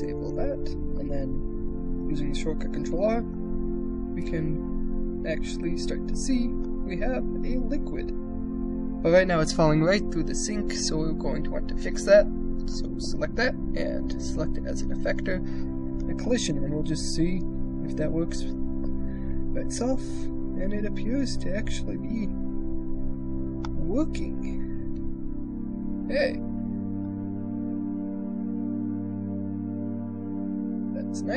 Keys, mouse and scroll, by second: 0.7 middle click, 2.0 ctrl+r, 2.8 shift+click, 3.4 click, 3.8 shift+space, 4.9-5.9 drag, 6.5 click, 8.0 shift+space, 8.3 click, 11.2 click, 15.7 click, 16.8 ctrl+r, 17.1 shift+space, 23.5 middle click, 25.0 shift+space, 25.4-26.8 drag, 27.9-29.0 drag, 29.2 shift+space, 30.7 shift+click, 30.7 shift+space.